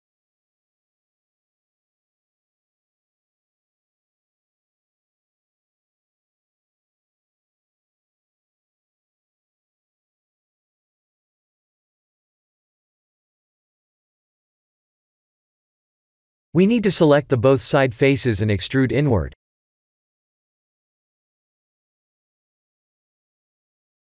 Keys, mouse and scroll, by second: 1.6 click, 1.6 3, 2.4 shift+z, 4.2 l, 9.5 middle click, 14.2 ctrl+z, 14.6 middle click, 17.2 shift+z, 17.8 3, 18.3 shift+click, 18.7 middle click, 20.9 shift+z, 22.8 i.